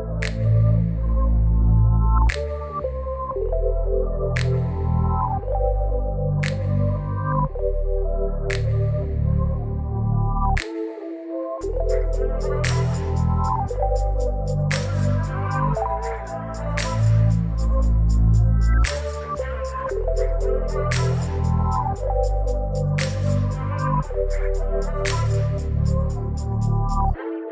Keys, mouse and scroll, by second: 18.7 ctrl+t, 21.2-27.5 shift+drag.